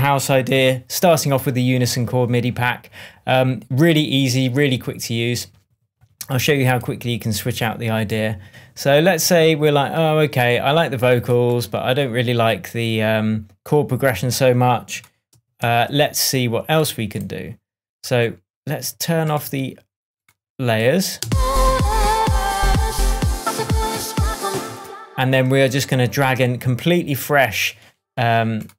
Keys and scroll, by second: 0.4 super+s, 15.6 super+l, 21.2 space, 24.4 space.